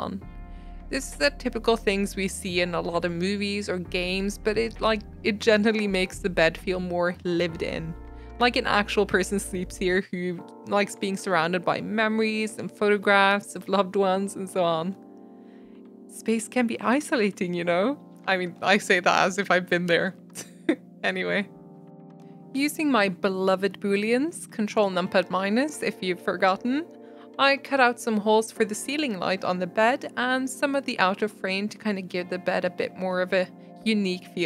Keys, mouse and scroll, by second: 0.4 middle click, 0.6 scroll down 2, 0.7 middle click, 0.8 alt+z, 1.2 click, 1.4 click, 1.4-2.4 middle drag, 2.4 click, 2.7 shift+click, 3.0 shift+click, 3.2 e, 5.0 click, 5.5 e, 5.9 Tab, 6.0 middle click, 6.3 scroll up 1, 6.5 shift+middle click, 7.3-7.7 scroll up 3, 7.5 shift+middle click, 7.7 Tab, 7.8 middle click, 7.9 2, 8.0 click, 8.2 shift+middle click, 8.9 ctrl+b, 10.1 Tab, 10.2 middle click, 10.3 scroll down 1, 10.4-11.1 middle drag, 11.2 Tab, 11.2 middle click, 12.0 click, 12.1 middle drag, 12.4 ctrl+b, 13.5 Tab, 13.6 scroll down 1, 13.8-14.8 shift+middle drag, 14.8 Tab, 15.2 Tab, 15.2 middle click, 15.4 KP_Divide, 15.7-16.0 middle drag, 16.0-16.5 scroll up 3, 16.1 shift+middle drag, 16.6-17.5 shift+middle drag, 17.5 g, 17.9 s, 19.0 g, 20.3 s, 21.5 middle click, 22.3 ctrl+z, 22.5 2, 22.8 middle click, 23.0 shift+click, 23.2 shift+click, 23.3 middle click, 23.4 ctrl+b, 24.6 middle click, 24.7 Tab, 24.8 middle click, 25.0 right click, 25.4 click, 25.5 g, 25.7-26.4 middle drag, 26.4 shift+click, 26.6 ctrl+KP_Subtract, 27.1 g, 29.1 Tab, 29.3 g, 29.9-30.6 middle drag, 30.9 click, 31.0 click, 31.1 shift+d, 31.5 g, 32.0 shift+click, 32.2 ctrl+KP_Subtract, 32.4 click, 32.6 middle drag, 32.7 g, 33.1-33.5 shift+middle drag, 33.5 scroll up 1, 33.6-34.1 middle drag, 34.1 s.